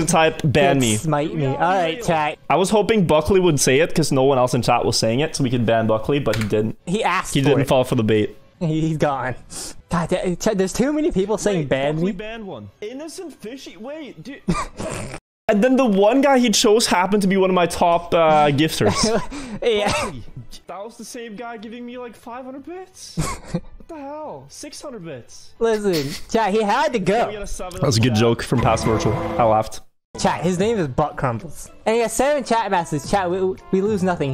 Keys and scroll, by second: 1.9 Left, 2.1 Left, 8.3 Up, 8.3 Right, 8.7 Left, 20.3 Up, 21.3 Left, 21.6 Down, 23.1 Right, 24.6 Left, 25.0 Right, 25.5 Up, 30.1 Up, 30.2 Left, 32.8 Left, 33.6 Left.